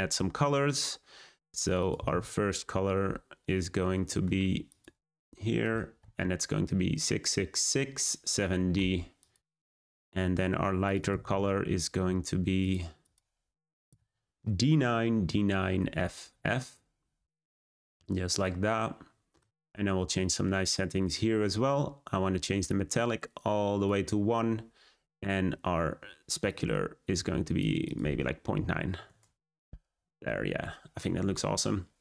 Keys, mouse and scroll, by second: 12.6 click, 22.9-32.0 drag.